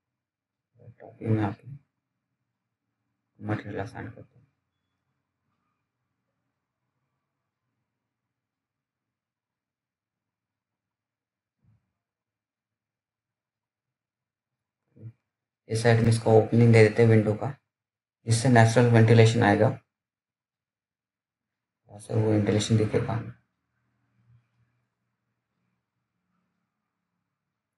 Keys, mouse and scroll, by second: 0.2 click, 0.7 scroll down 1, 1.2 alt+middle click, 1.8 alt+scroll up 1, 2.1 click, 2.7 alt+middle click, 3.4-4.6 scroll up 1, 4.6 click, 5.2 alt+middle click, 6.2 scroll down 1, 6.4 alt+middle click, 7.4 t, 8.1-8.8 scroll down 1, 8.8-9.1 scroll up 1, 9.1 click, 9.8-10.2 scroll down 1, 10.2 middle click, 10.8 click, 14.0 click, 18.1 F3, 21.0-21.6 scroll down 1, 21.7 alt+middle click, 24.9 click.